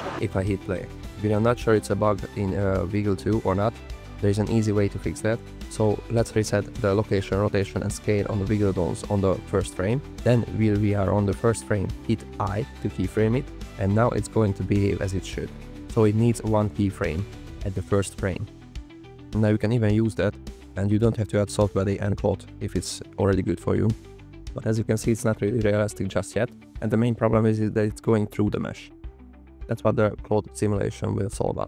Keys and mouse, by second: 0.5 space, 4.2 space, 6.5 alt+r, 6.8 alt+g, 7.6 click, 8.3 alt+r, 8.7 alt+g, 8.9 alt+s, 12.2 i, 15.6 space, 17.6 click, 22.0 click, 24.4 space, 26.2 space, 26.4 click, 27.3 click, 30.7 drag, 31.1 shift+drag.